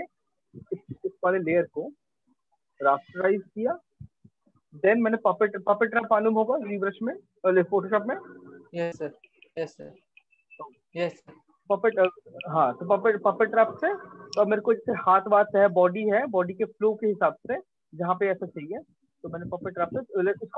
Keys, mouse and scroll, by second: 0.9 right click, 2.3 click, 6.8 click, 9.5 click, 12.0 click, 13.2 click, 14.0 click, 14.1 click, 14.2 click, 14.3-14.7 click, 15.0-17.0 ctrl+click, 16.9 click, 17.0 click, 17.1 click, 17.7 click, 17.8 click, 19.2 click, 20.5 click.